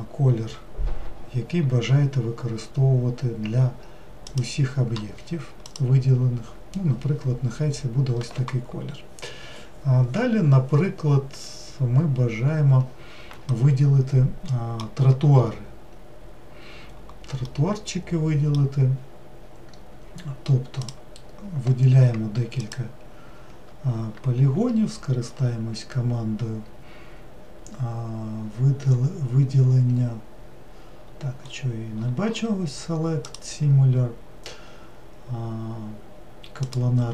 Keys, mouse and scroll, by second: 0.2 middle click, 5.8 click, 13.6-15.4 middle drag, 15.4-17.5 scroll up 1, 17.7-20.9 middle drag, 20.9 click.